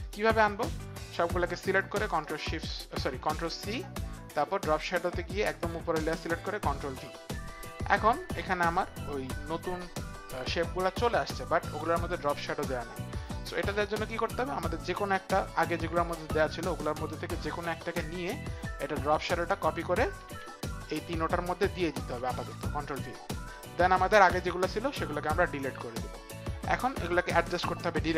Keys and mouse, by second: 0.0 click, 1.7 shift+click, 3.5 ctrl+c, 4.3 ctrl+c, 4.3 shift+click, 5.7 ctrl+c, 5.7 shift+click, 7.3 ctrl+v, 19.4 click, 20.2 ctrl+c, 21.4 click, 22.9 ctrl+v, 24.2 click, 25.8 Delete, 25.8 ctrl+v, 25.8 click.